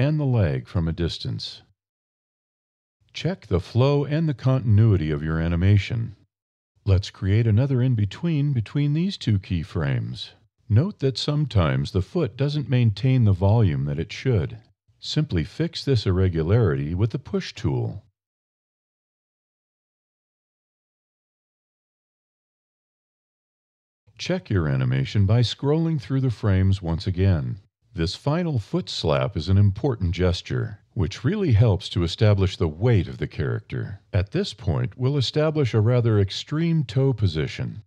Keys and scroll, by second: 10.4 ctrl+e, 15.7 e, 19.2 e, 23.3 e, 31.2 ctrl+f.